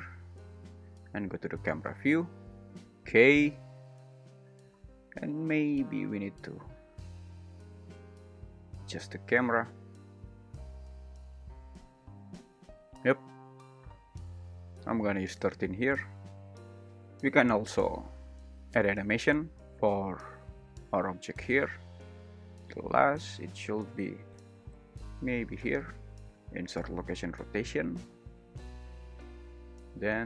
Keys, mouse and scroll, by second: 6.2 click, 7.5 `, 8.0 g, 8.4 z, 10.8 click, 11.1-12.3 typing, 11.4 Escape, 11.9 Return, 13.8 click, 16.5 g, 16.6 Escape, 18.3 `, 19.8 super+`, 21.1 g, 21.4 z, 22.2 Escape, 22.2 shift+l, 22.5 shift+r, 25.8 click, 26.3 n.